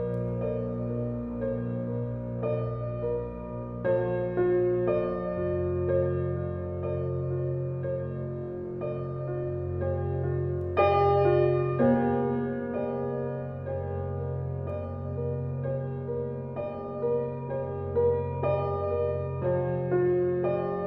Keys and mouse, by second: 0.0 n, 2.1 click, 2.7 click, 3.0 click, 3.3 click, 3.6 click, 3.9 click, 4.4 click, 5.2 click, 5.5 click, 5.6 click, 6.6 click, 7.0 click, 7.4 click, 8.0 click, 8.5 click, 9.0 click, 9.4 click, 9.9 click, 10.5 click, 11.0 click, 11.5 click, 11.9 click, 12.4 click, 12.9 click, 13.3 click, 13.7 click, 14.8-15.9 drag, 16.1 click, 16.6 click, 17.3 click, 18.3 click, 18.7 click.